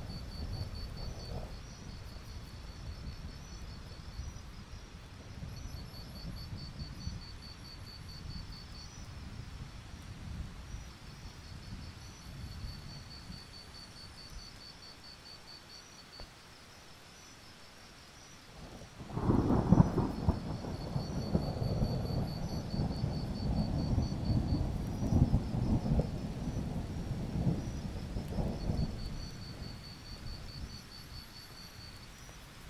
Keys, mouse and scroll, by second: 5.9 right click, 6.2 click, 6.4 alt+scroll down 1, 8.2-11.0 drag, 12.0-13.5 alt+scroll up 1, 13.5-15.0 drag, 16.9-17.4 alt+scroll up 1, 17.4-18.8 drag, 19.0 alt+scroll down 1, 19.2-19.9 scroll up 1, 21.1 click, 24.2-25.2 scroll up 1, 26.7 click, 26.8-28.3 scroll down 1, 28.3 click, 31.1 Escape, 31.9-32.6 drag.